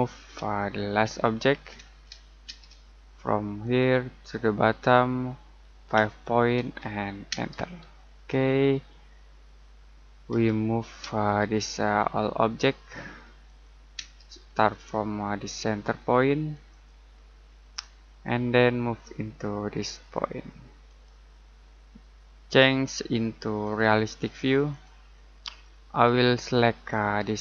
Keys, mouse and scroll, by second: 0.4 space, 0.8 l, 1.8 space, 3.6 click, 5.9 5, 7.3 space, 8.1-8.9 scroll down 1, 8.9 middle click, 10.3 m, 11.0 space, 11.5 click, 13.9 space, 14.4-16.5 scroll up 1, 16.5 click, 17.1 scroll down 1, 17.7 middle click, 18.3-20.5 scroll up 1, 20.8 click, 21.6-22.4 scroll down 1, 23.6 click, 25.6 middle click, 26.2-27.4 scroll up 1.